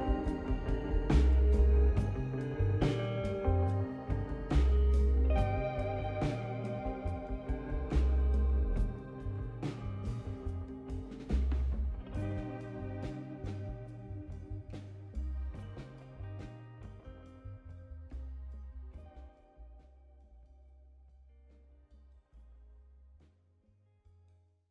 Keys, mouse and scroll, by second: 3.4-3.9 scroll down 1, 4.3-6.0 drag, 6.0 shift+d, 8.5-9.1 scroll down 1, 9.1 click, 10.0 click, 14.7 click, 15.0-15.8 scroll down 1, 15.8 click, 18.4 click.